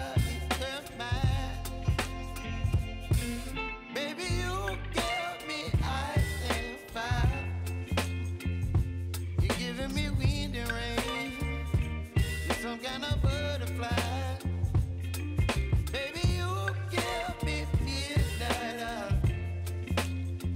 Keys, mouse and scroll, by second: 8.8 p, 9.5 click, 9.9 space, 12.8-16.6 drag, 16.6 ctrl+z, 17.3-20.5 drag.